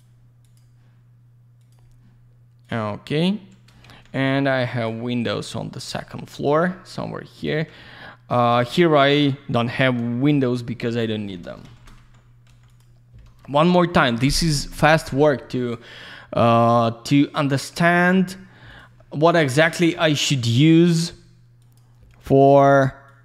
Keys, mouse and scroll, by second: 0.0 click, 0.4 click, 0.6 click, 1.6 click, 1.7 click, 2.6 click, 2.7 click, 3.8 alt+shift+q, 4.7 click, 5.8 click, 6.4 click, 7.4 ctrl+click, 7.7 middle click, 8.5 alt+z, 8.6 click, 9.9 scroll down 1, 10.3 alt+middle click, 10.7 alt+q, 11.0 alt+middle click, 11.2 alt+middle click, 11.6 ctrl+shift+g, 12.2 scroll up 1, 12.7 click, 12.8 click, 13.6 ctrl+shift+g, 14.9 click, 15.0 click, 15.6 click, 15.7 click, 16.6 click, 16.7 click, 17.4 click, 17.6 click, 17.9-18.7 scroll down 1, 18.7 click, 18.8 click, 19.0 middle click, 19.6 click, 19.7 click, 20.0 alt+shift+q, 20.9 click, 21.0 click, 21.6 click, 21.7 click, 23.1 click.